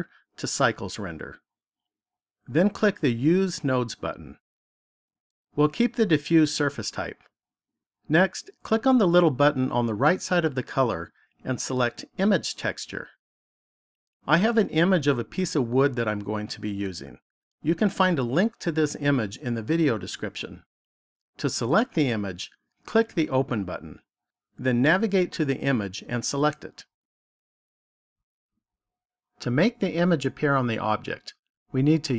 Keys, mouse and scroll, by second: 4.0 click, 9.4 click, 23.2 click, 29.3 click.